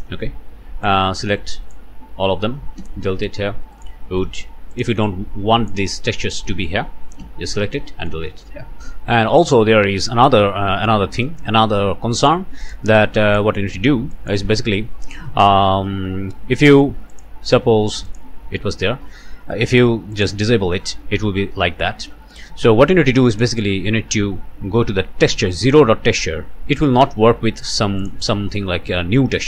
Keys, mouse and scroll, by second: 0.0 Delete, 0.8-1.9 drag, 2.8 Delete, 3.7 click, 4.2 click, 4.7 click, 5.1 click, 6.5 click, 7.2 Delete, 7.9 click, 8.2 scroll down 1, 9.4 click, 12.2 click, 12.6 click, 13.3 click, 14.1 click, 14.5 Delete, 17.1 click, 18.1 click, 18.7 scroll down 2, 20.2 click, 23.3 click, 28.0 click.